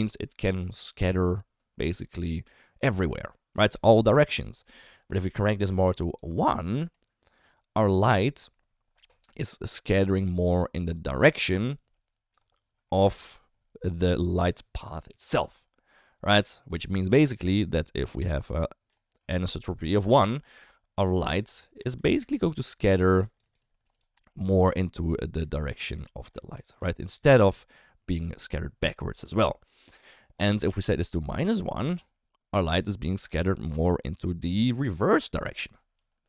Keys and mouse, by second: 6.1-12.3 drag, 17.1-20.5 d, 17.3-18.9 drag, 20.6 d, 20.9-22.1 drag, 22.1-24.2 typing, 23.2 click, 23.5 click, 23.9 click, 24.6-25.8 drag, 25.8 d, 25.8 d, 26.0 d, 26.1-27.1 drag, 27.1 d, 27.3-29.8 d, 31.3 click, 32.5 d, 32.7-34.0 drag, 34.0 d, 35.5-36.2 typing, 35.9 click.